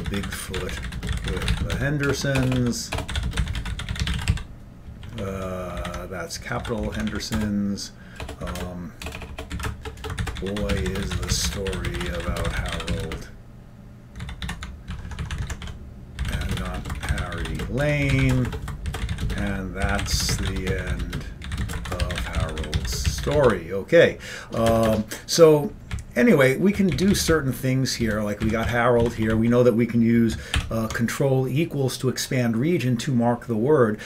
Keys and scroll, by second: 0.0-14.1 typing, 14.5 alt+b, 15.2 alt+b, 15.2 Right, 15.4 Right, 15.7-23.7 typing, 25.1 Return, 25.1 typing, 26.1 Up, 26.5 Up, 26.7 Up, 27.6 Up, 28.3 Down, 28.5-31.2 typing.